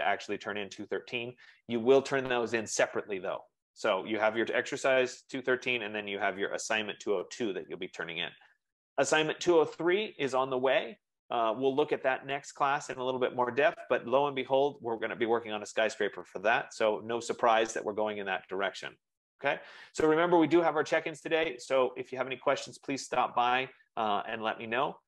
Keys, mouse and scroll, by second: 2.4 F15.